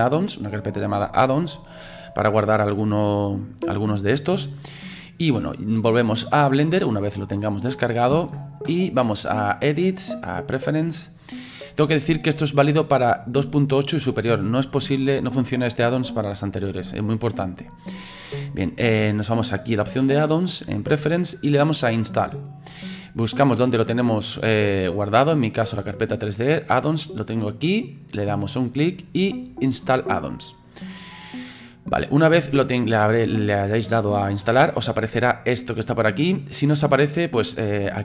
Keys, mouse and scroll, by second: 9.5-12.5 drag.